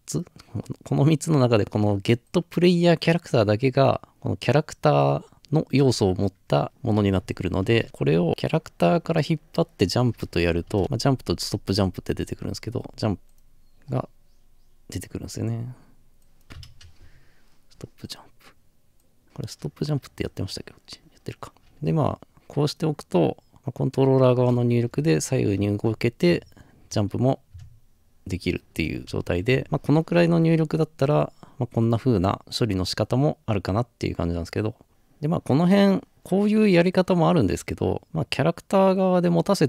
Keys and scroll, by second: 7.0 ctrl+c, 7.6 ctrl+v, 10.7 typing, 16.4 typing, 25.5-26.3 typing, 29.0-29.6 typing, 29.6 Escape.